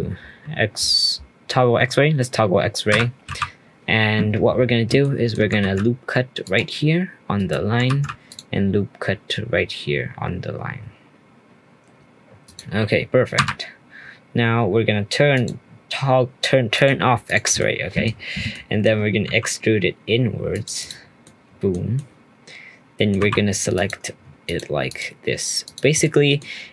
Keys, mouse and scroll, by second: 4.4-5.0 scroll up 1, 5.0 shift+middle click, 7.8 ctrl+r, 15.3-16.8 drag, 17.2 shift+click, 17.5 scroll up 1, 17.6 middle click, 18.0-18.5 scroll down 1, 18.5 shift+middle click, 19.2 e, 20.8 click, 21.2 middle click, 21.7 scroll up 2, 21.9-23.2 middle drag, 23.2 2, 23.7 click, 24.4 shift+click, 24.9 shift+click, 25.6 shift+click, 26.0-26.7 middle drag.